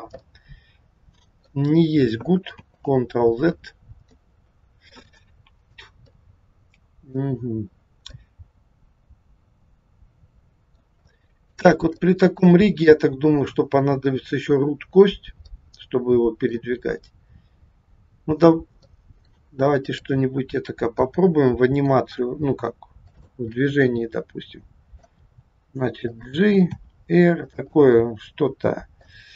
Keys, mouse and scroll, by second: 0.3 middle click, 2.6 ctrl+z, 4.1 middle click, 5.6-6.0 scroll down 1, 6.1 middle click, 7.6 scroll up 1, 8.2 middle click, 11.0 shift+middle click, 15.4 middle click, 18.8 middle click, 19.8 click, 21.0 middle click, 22.2 r, 23.5 middle click, 25.1 g, 26.8 r, 27.8 middle click.